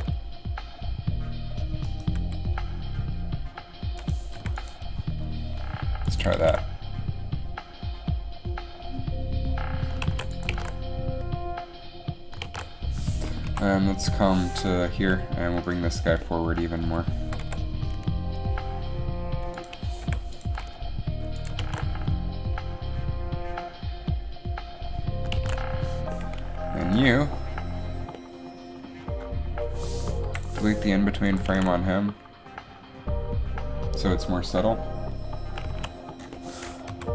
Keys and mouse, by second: 0.0 g, 2.3 g, 4.4 i, 6.6 alt+a, 10.2 alt+a, 10.6 alt+a, 12.7 alt+a, 13.6 Up, 17.4 g, 20.1 i, 21.7 alt+a, 25.6 alt+a, 26.3 alt+a, 30.3 Delete, 30.6 Delete, 31.6 alt+a, 35.9 alt+a, 37.0 Down.